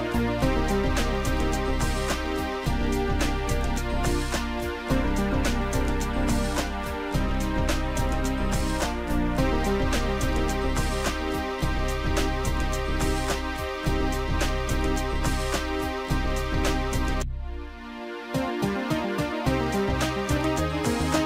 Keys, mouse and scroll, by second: 5.4 Delete, 6.5 click, 6.8 Delete, 9.6 shift+click, 10.9 shift+click, 12.4 shift+click, 13.2 shift+click, 14.5 click, 15.9 shift+click, 18.2 click, 18.8 click, 19.7 Delete, 20.9 click.